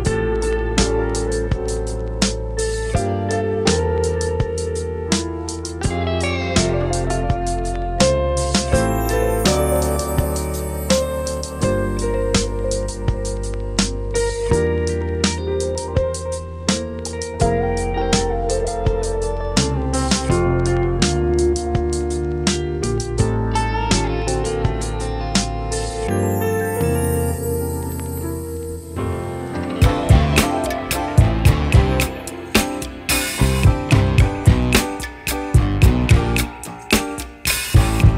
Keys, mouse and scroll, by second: 4.9 s, 7.0 g, 9.9 r, 13.1 click, 13.8 click, 15.7-21.9 drag, 21.9 ctrl+s, 22.7-32.5 drag, 32.5 shift+d, 33.8 g, 37.6 click.